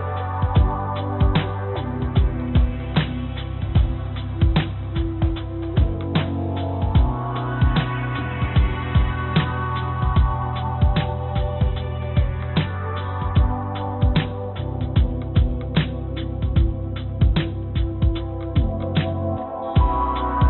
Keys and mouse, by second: 2.0 click, 2.2 click, 2.8 click, 3.0 click, 3.9 click, 4.3 click, 5.5 click, 6.6 click, 10.0 click, 10.1 click, 10.8 click, 11.0 click, 12.4 ctrl+s, 18.3 click, 18.7-20.4 drag.